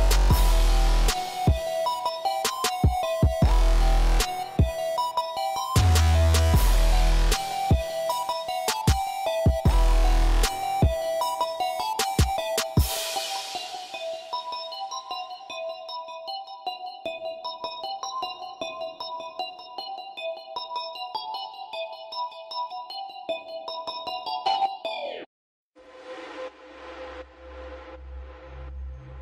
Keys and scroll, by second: 2.7 5, 3.0 Return, 6.0 r, 7.5 Tab, 8.3 Escape, 8.3 typing, 10.6 r, 13.2 8, 16.0 e, 23.1 a, 25.0 j.